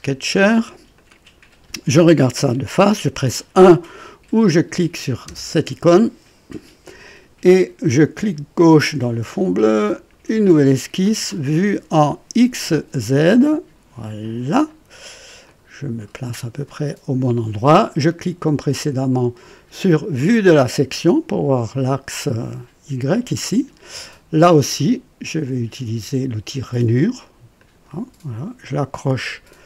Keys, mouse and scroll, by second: 0.9 click, 5.2 KP_1, 8.5 click, 9.9 click, 13.4 click, 14.2 click, 14.9 scroll up 1, 15.4 right click, 16.4 scroll up 1, 16.7 right click, 20.1 click, 27.5 click.